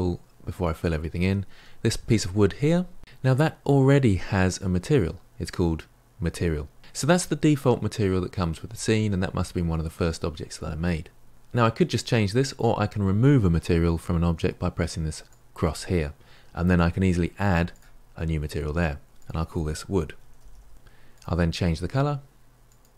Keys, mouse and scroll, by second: 15.3-20.7 drag, 20.7 o, 22.6 click.